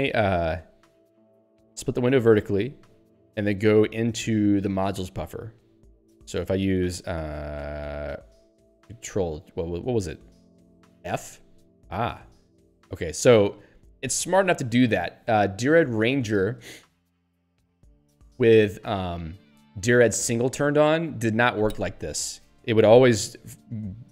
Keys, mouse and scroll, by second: 2.6 alt+o, 11.2 f.